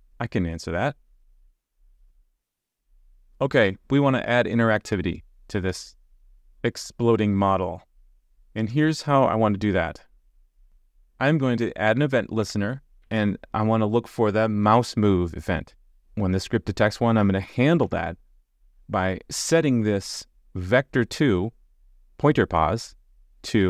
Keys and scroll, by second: 10.6 super+z, 13.0 super+z, 17.8 super+z, 23.0 super+z.